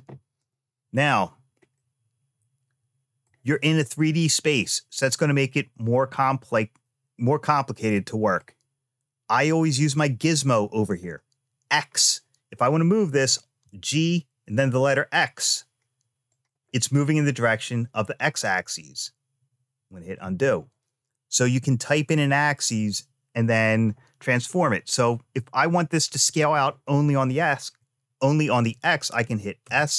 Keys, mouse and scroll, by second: 0.2-1.5 drag, 1.5-3.1 middle drag, 3.7-8.2 middle drag, 10.1 middle click, 12.6 click, 13.4 g, 20.0 ctrl+z, 29.4 s.